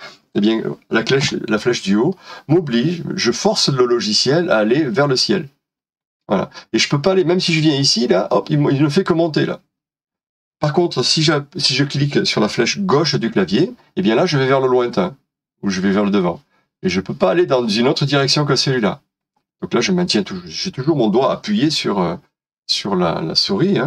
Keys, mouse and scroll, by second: 1.2 Up, 13.0 Left.